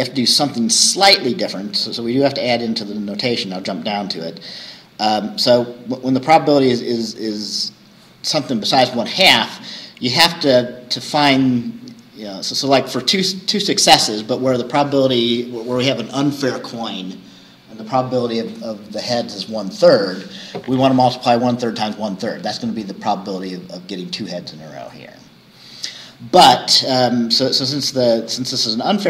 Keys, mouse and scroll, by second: 0.9-2.5 scroll down 4, 12.0 scroll down 2.